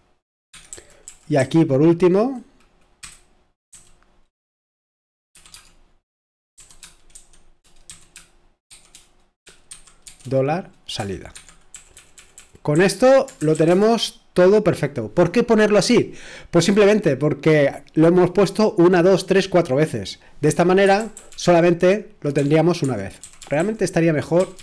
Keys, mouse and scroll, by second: 0.0-3.7 typing, 5.3 typing, 6.5-7.9 typing, 9.7-13.7 typing, 20.8 Escape, 21.0 typing, 23.1-24.6 typing.